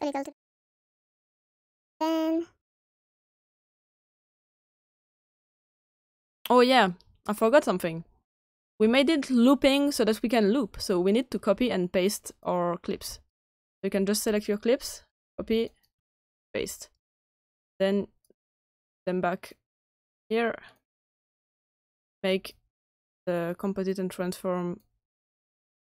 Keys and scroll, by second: 15.1 ctrl+c, 16.1 ctrl+v.